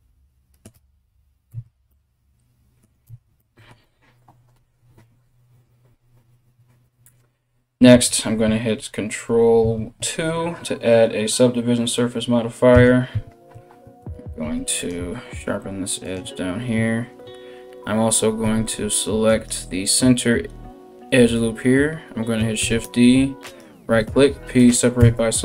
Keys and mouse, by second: 1.1 Tab, 2.7 Tab, 7.6 Tab, 9.8 ctrl+2, 12.4 Tab, 14.0 ctrl+r, 18.0 2, 18.9 right click, 22.2 shift+d, 23.7 p, 24.6 Tab, 25.3 right click.